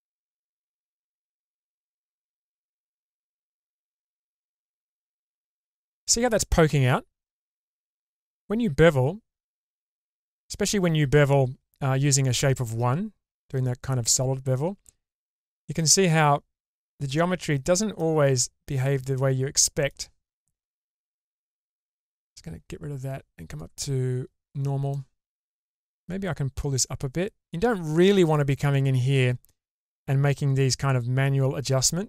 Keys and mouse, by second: 3.2 click, 3.7-15.4 middle drag, 15.4 click, 16.0 middle click, 16.3-17.9 drag, 16.3-17.9 right drag, 18.7 click, 19.1 click, 19.1 right click, 19.8 middle click, 20.9-24.5 drag, 24.9-26.0 middle drag, 26.8-29.1 drag, 29.5-32.0 middle drag.